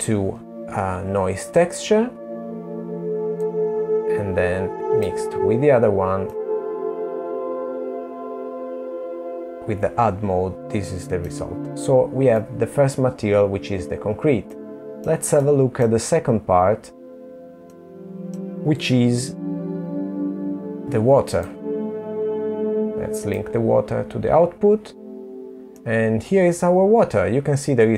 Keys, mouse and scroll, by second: 1.4 click, 4.4 middle click, 10.4 middle click, 12.5 middle click, 13.5 middle click, 14.4-15.8 scroll up 1, 15.8 middle click, 15.8-16.5 scroll up 1, 19.6 click.